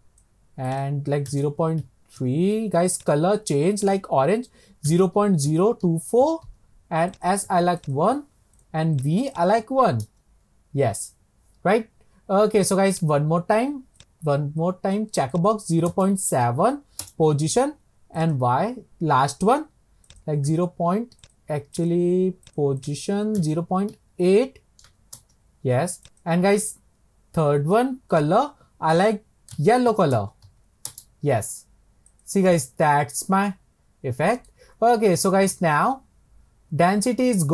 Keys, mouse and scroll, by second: 13.1-20.3 drag, 22.2 click, 22.9-28.6 drag, 32.3 click, 32.8-37.3 middle drag.